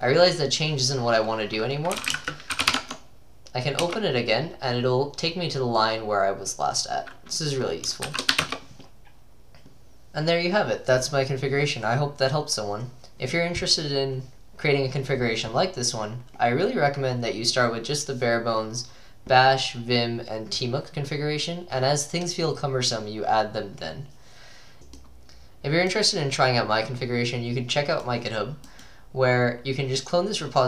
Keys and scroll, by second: 1.7-3.2 typing, 3.9 Return, 8.1 typing, 8.4 Return, 8.5 Return, 9.7-10.4 typing.